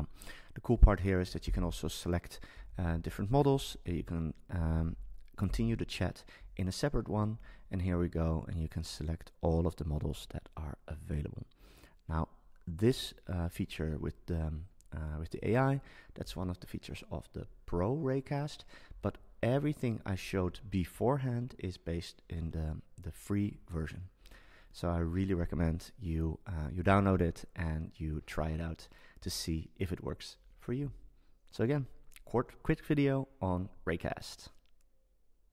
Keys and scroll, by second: 1.4 super+k, 2.7 Down, 4.7 Up.